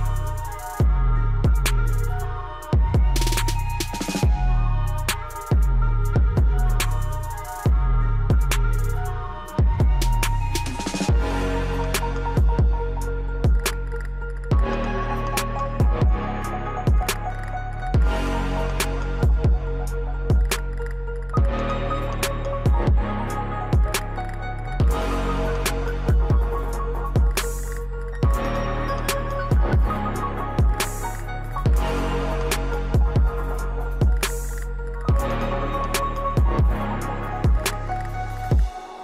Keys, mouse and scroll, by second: 1.4-3.8 drag, 3.8 ctrl+right click, 4.6-7.1 drag, 7.1 ctrl+right click, 8.0-9.6 drag, 9.6 ctrl+right click, 10.8 click, 12.5 scroll down 1, 13.9-17.9 ctrl+drag, 17.9 ctrl+right click, 18.9 click, 19.8-20.4 scroll up 1, 21.1-23.5 alt+drag, 23.5 ctrl+right click, 25.4 click, 26.3-26.7 scroll up 1, 27.6-29.4 drag, 29.4 ctrl+right click, 30.4-30.7 scroll down 1, 31.5-33.3 drag, 33.3 scroll down 1, 34.6-37.1 drag, 37.1 ctrl+right click, 38.0-38.8 scroll up 1.